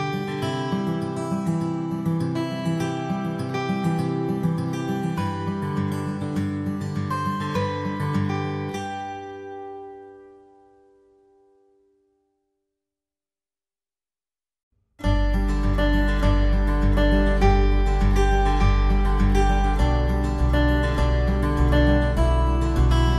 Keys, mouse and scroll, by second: 1.3 alt+middle click, 4.9 alt+w, 5.9 middle click.